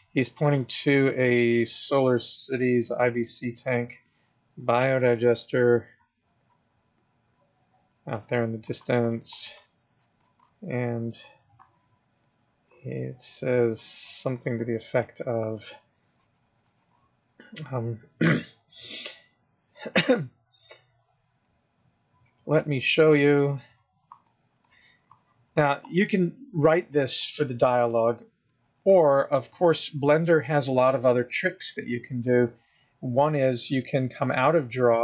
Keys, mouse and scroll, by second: 0.5 click, 1.2 click, 2.2 click, 3.1 click, 4.2 click, 6.1 click, 6.4 click, 8.5 click, 8.9 click, 9.3 click, 9.6 click, 9.8 click, 10.2 click, 10.5 click, 10.7 click, 10.9 click, 11.9 click, 13.0 click, 13.2 click, 13.3 click, 13.7 click, 13.9 click, 14.1 click, 14.4 click, 14.6 click, 15.6 click, 16.3 click, 19.3 click, 21.5 click, 21.7 click, 21.9 click, 22.9 click, 23.2 click, 23.4 click, 23.7 click, 24.5 click, 24.9 click, 25.3 click, 25.6 click, 28.1 click, 28.8 click, 29.1 click.